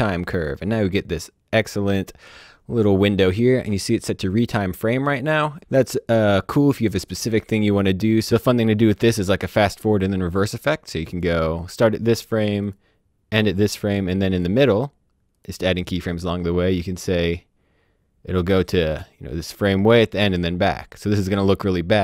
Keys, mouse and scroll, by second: 7.1 click, 10.4 click, 12.6 click, 17.2 click, 20.9 click.